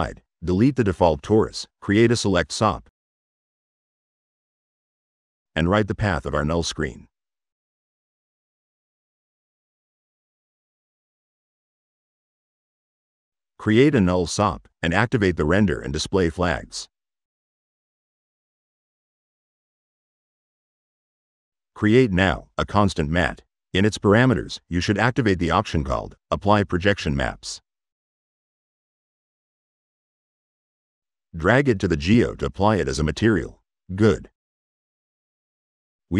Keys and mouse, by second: 0.2 middle click, 0.6 click, 1.0 Delete, 1.4 click, 1.8-2.7 typing, 2.7 drag, 4.0 click, 4.5 click, 5.3 click, 11.2 click, 11.5 click, 12.0 middle click, 12.8 click, 13.3 right click, 14.2 u, 15.2 click, 16.0 click, 16.7 click, 17.3 click, 20.5 click, 21.9 click, 23.0 click, 23.9 click, 28.0 click, 31.5 click, 35.8 click.